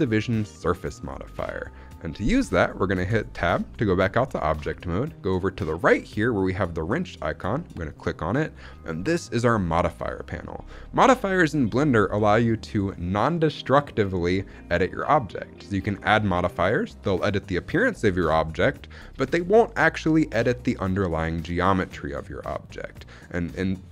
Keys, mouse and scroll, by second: 2.7 shift+middle click, 3.2 Tab, 7.8-8.7 drag.